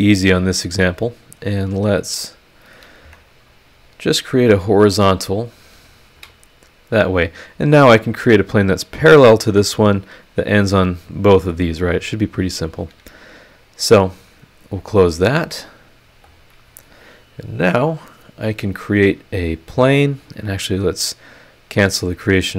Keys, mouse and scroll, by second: 0.8 click, 1.9 click, 3.0 Escape, 4.3 click, 5.5 click, 6.1 h, 6.8-7.1 scroll down 2, 11.5 scroll up 2, 12.2 scroll up 1, 14.7 click, 16.0 scroll up 1, 16.2 click, 18.8 click, 20.3 click, 21.7 click.